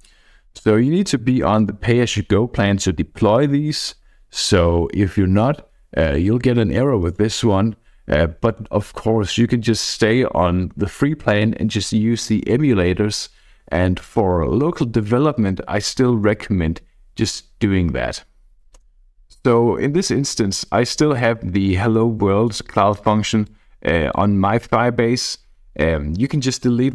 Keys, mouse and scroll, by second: 18.8 KP_Enter, 20.6 click, 21.9-23.0 scroll down 1, 23.4 click.